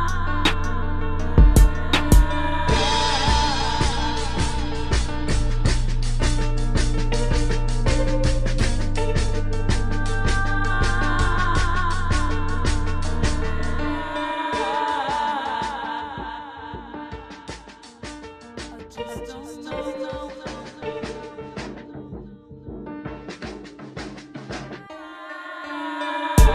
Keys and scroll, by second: 1.1 space, 2.2 space, 3.3 space, 3.9 space, 5.8 space, 11.3 space, 12.9 space, 16.8 space, 17.5 space, 17.9 space, 18.5 space, 20.0 space, 20.5 space, 21.6 space, 22.4 space, 26.1 space.